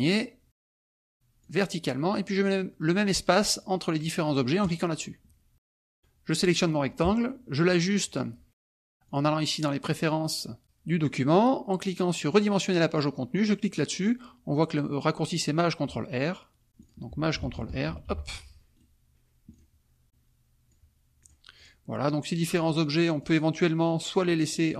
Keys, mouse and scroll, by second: 1.4 click, 4.6 click, 6.0 click, 9.0 click, 12.3 click, 16.8 click, 17.9 ctrl+shift+r, 18.7 right click, 19.0 middle click, 19.5 click, 20.0-20.9 drag, 21.2 click, 21.5 click, 22.0-23.4 drag, 23.6-24.3 drag.